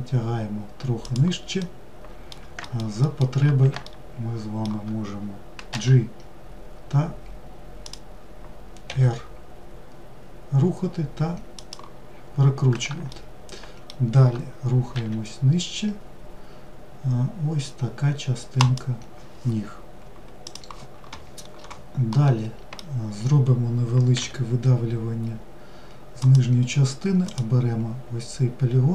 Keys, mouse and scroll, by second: 1.3-2.3 middle drag, 2.6 alt+middle drag, 3.5-5.4 shift+middle drag, 5.4 g, 12.8-14.6 shift+middle drag, 14.6 e, 21.7-23.7 middle drag, 23.7 e, 26.8 click.